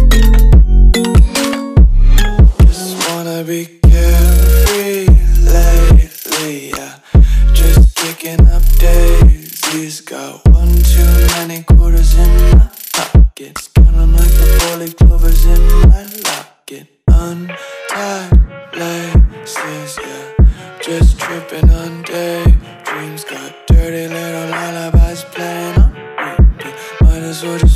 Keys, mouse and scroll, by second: 3.8 click, 25.5 ctrl+Num_Lock, 26.5 click.